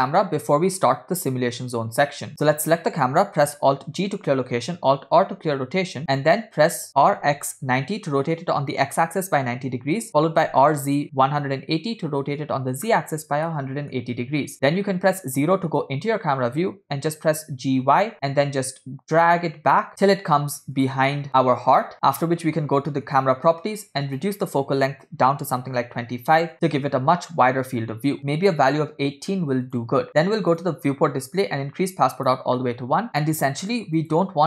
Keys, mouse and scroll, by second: 0.2 middle click, 2.3 click, 3.8 alt+g, 5.2 alt+r, 10.1 r, 13.5-14.0 middle drag, 14.9 KP_0, 17.3 g, 23.1 click, 24.1-26.5 drag, 28.2-29.8 drag, 30.5 click, 30.9 scroll down 1, 31.6 click, 34.0 click.